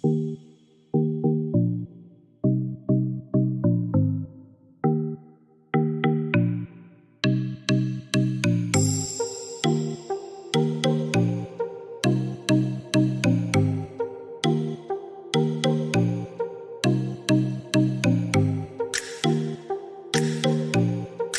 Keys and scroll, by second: 14.7-15.6 typing, 19.7 5, 20.6 0, 21.1 Return.